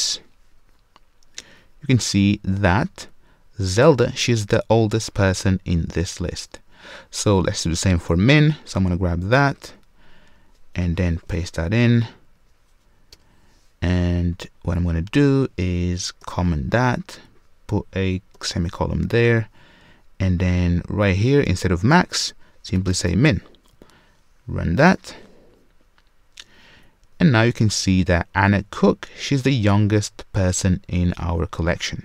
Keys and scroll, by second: 11.1 super+v, 16.2 super+/, 24.8 shift+F10.